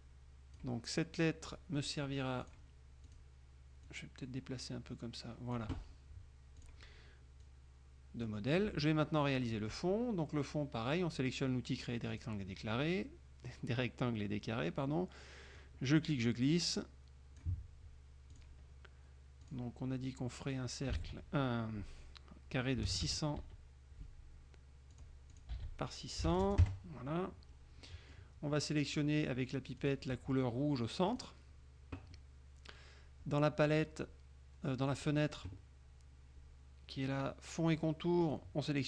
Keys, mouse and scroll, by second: 2.6 click, 3.2 click, 4.0-5.9 drag, 6.7 click, 7.6-8.6 drag, 9.6 click, 12.2 click, 15.7-17.7 drag, 18.4 click, 19.6 click, 21.1 ctrl+a, 22.9 KP_6, 23.6 Tab, 25.1 click, 25.5 ctrl+click, 25.7 ctrl+a, 26.5 KP_0, 26.8 KP_Enter, 28.0 click, 30.0 click, 31.2 click, 35.0 click, 38.4 click.